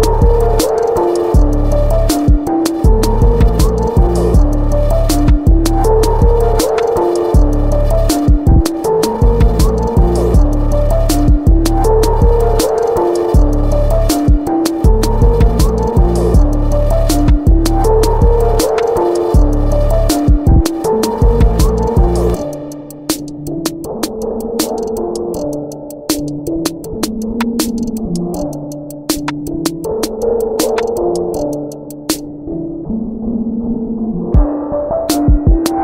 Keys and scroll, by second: 1.5 ctrl+z, 7.4 b, 12.5 Delete, 12.8 Delete, 18.5 ctrl+BackSpace, 25.3 Return, 34.0 ctrl+z, 34.7 ctrl+shift+z.